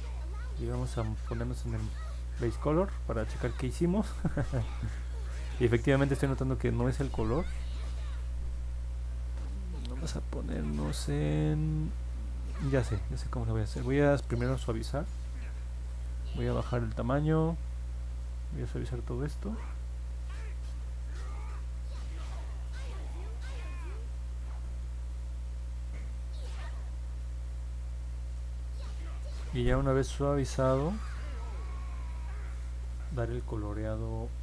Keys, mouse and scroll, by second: 2.1 click, 19.2 click, 19.9 click, 20.4 click, 21.1 click, 21.4 click, 21.7 click, 22.1 click, 22.4 click, 23.0 click, 23.6 click, 24.0 click, 24.6 click, 25.1 click, 25.5 click, 26.2 click, 26.5 click, 26.8 click, 27.1 click, 27.6 click, 28.0 click, 28.9 click, 29.0 click, 29.4 click, 29.9 click, 30.3 click, 30.6 click, 31.0 click, 31.5 click, 31.9 click, 32.5 click, 32.9 click, 33.8 click, 34.2 click.